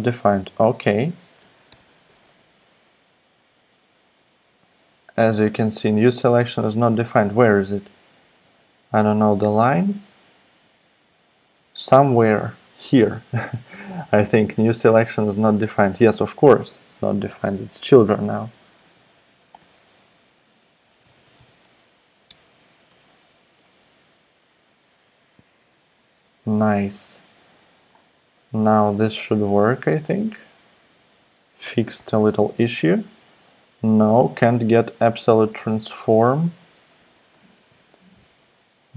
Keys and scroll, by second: 1.7 alt+super+i, 5.4 super+Tab, 7.4 super+Tab, 8.4 super+Tab, 18.2-22.6 typing, 22.9 Tab, 28.5 super+s, 32.0 alt+super+p, 35.5 super+z, 37.3 alt+super+i, 37.7 alt+super+i.